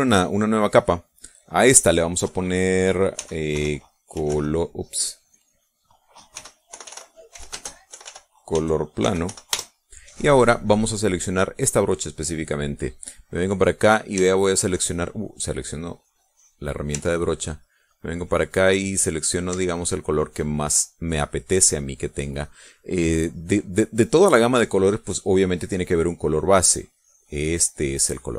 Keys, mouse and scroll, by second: 0.8 click, 1.8 click, 3.7-5.3 typing, 5.8 click, 6.6-10.3 typing, 13.6 middle click, 14.0 click, 14.1 middle click, 16.4 click, 18.1-20.5 ctrl+drag, 20.9 middle click, 21.5 middle click, 22.5 middle click, 22.7 click, 25.3 click, 25.9 click, 26.8-28.3 drag.